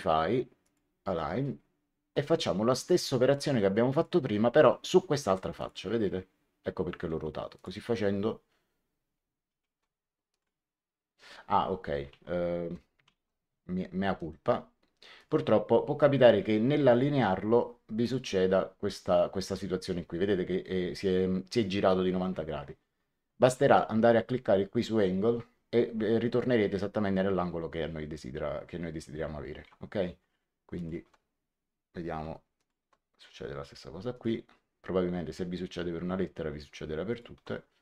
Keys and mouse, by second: 0.6 click, 3.8 click, 5.5 click, 7.5 ctrl+click, 10.2 click, 12.4 ctrl+z, 13.1 ctrl+z, 14.1 right click, 15.1 click, 16.8 ctrl+click, 17.9 click, 23.4 click, 30.7 ctrl+click, 32.5 ctrl+click, 34.1 click, 37.0 ctrl+click.